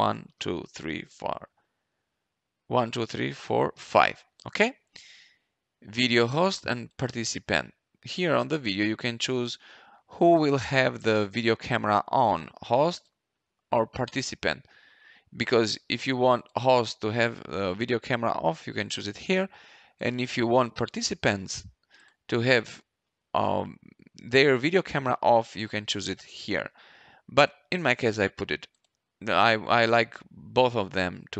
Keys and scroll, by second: 0.0-1.5 typing, 3.7 5.